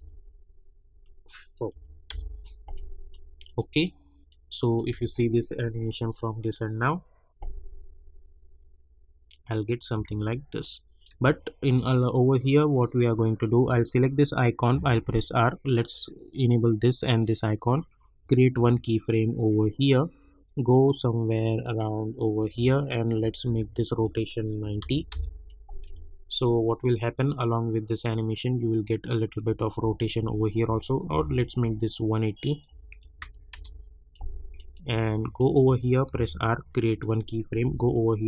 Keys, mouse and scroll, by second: 0.0-0.4 typing, 1.3 click, 2.0 Return, 2.7-4.8 drag, 4.8 space, 9.9 space, 10.6 click, 11.2 space, 12.6 click, 14.7 r, 16.4 click, 18.5 space, 22.4 space, 24.0 click, 25.1 Return, 25.4 click, 25.9 space, 29.4 space, 31.1 j, 32.4 click, 33.5 Return, 34.1-35.8 drag, 36.1 r, 36.8 click, 37.6 k.